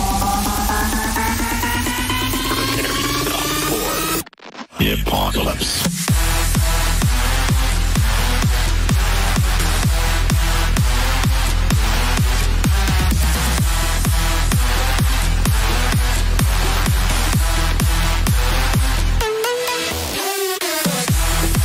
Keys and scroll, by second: 2.2 F4, 7.3 shift+Page_Up, 12.3 shift+F2, 12.7 Escape.